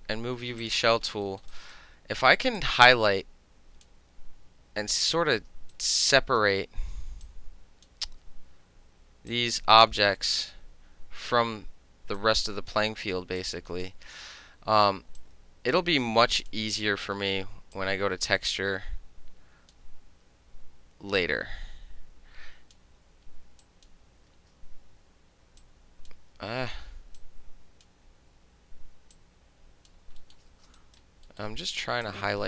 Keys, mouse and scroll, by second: 0.6 click, 0.7-1.3 middle drag, 1.4 alt+middle click, 1.5 alt+click, 1.7-2.6 alt+middle drag, 2.6-3.9 drag, 3.9-4.8 middle drag, 5.7 alt+right click, 7.3-7.9 drag, 8.1 ctrl+z, 9.3-10.4 drag, 10.4-12.2 middle drag, 12.2 click, 12.7-13.4 middle drag, 13.4 click, 13.8-15.2 middle drag, 15.2-16.5 drag, 16.5-17.6 middle drag, 17.8-19.7 drag, 21.2-22.7 drag, 23.6 drag, 24.3 ctrl+z, 25.6-26.1 drag, 26.3 ctrl+z, 27.2-27.8 drag, 29.2-29.9 drag, 30.2 alt+middle click, 30.5 ctrl+z, 30.8 alt+right click, 31.3 alt+middle click, 32.1-32.4 shift+drag.